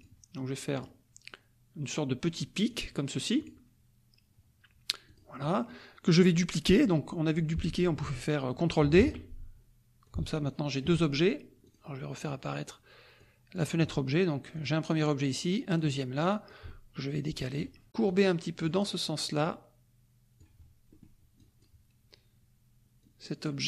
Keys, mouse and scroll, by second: 0.0 click, 0.7 click, 2.7 click, 3.4 click, 5.0 click, 5.4 middle click, 8.9 ctrl+d, 10.0 ctrl+click, 11.6 click, 13.2 click, 14.6 click, 15.7 click, 16.4-17.7 ctrl+drag, 18.0 click, 19.4-20.5 drag, 20.9 middle click, 20.9-21.2 scroll up 1, 21.3 click, 23.0 click.